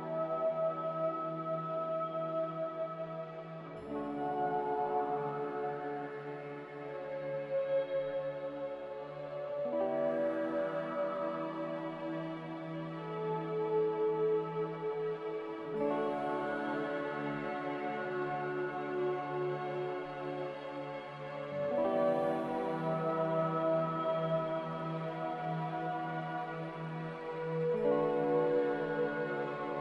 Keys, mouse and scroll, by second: 20.9-21.9 typing.